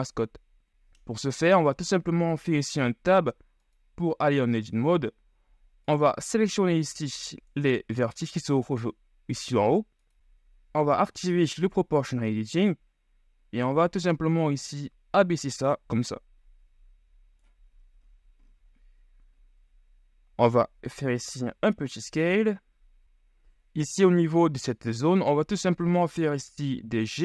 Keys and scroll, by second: 2.7 Tab, 8.1 c, 20.5 s, 25.3 s, 25.4 g.